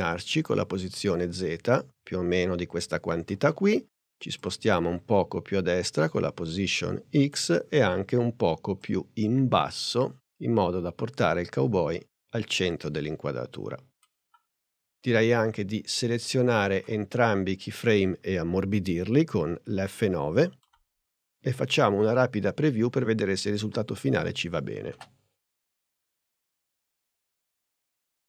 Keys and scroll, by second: 20.5 F9, 24.9 space.